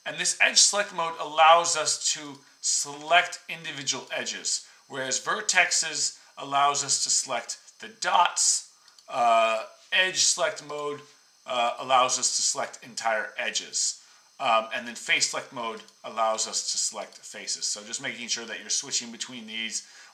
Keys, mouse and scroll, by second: 9.4 click, 10.6 click, 12.4 click, 13.5 click, 14.9 click, 16.3 click, 17.0-20.1 drag.